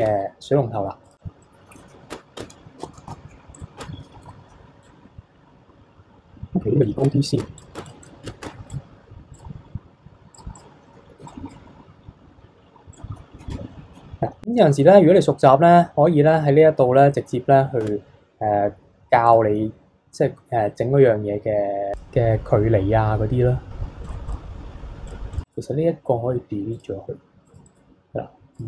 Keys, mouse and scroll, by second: 0.0 Tab, 1.0 click, 1.4-1.7 middle drag, 1.7 KP_3, 2.1 Tab, 2.4 Tab, 2.8 a, 3.1 s, 3.8 Tab, 4.2 a, 4.8 click, 7.0 Tab, 7.4 Tab, 7.6 click, 7.8 Tab, 7.9 click, 8.0 click, 8.4 Tab, 8.7 click, 9.3-10.4 drag, 10.6 click, 11.2 b, 12.9-14.4 drag, 17.8 Tab, 19.3 click, 21.9 click, 24.0 click, 24.3 click, 25.1 drag, 25.3 click, 25.4-27.4 right drag, 27.4 click, 27.7-28.6 right drag.